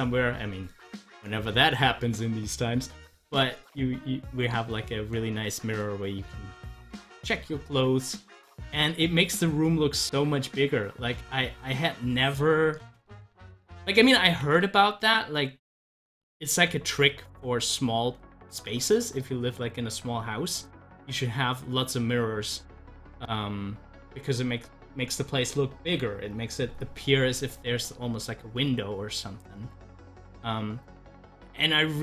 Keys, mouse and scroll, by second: 4.7 scroll down 1, 6.1 scroll up 1, 8.9-13.0 drag, 13.1 ctrl+z, 14.3 ctrl+z, 18.5 z, 20.0 click, 20.2 double click, 26.4-32.0 drag.